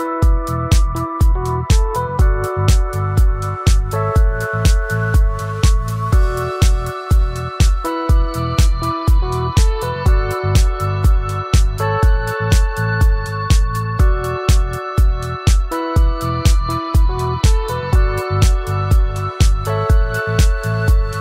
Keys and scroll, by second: 3.8 ctrl+z, 10.3 ctrl+alt+z.